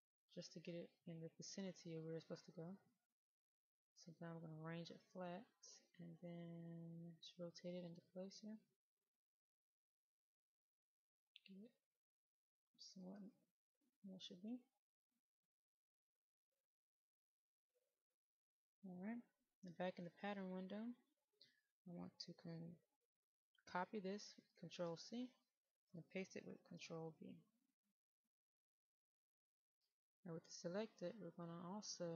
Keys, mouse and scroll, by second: 6.4-13.3 drag, 13.3 right click, 15.6 click, 20.1 middle click, 21.5 click, 24.5 ctrl+c, 26.5 ctrl+v, 28.4 click.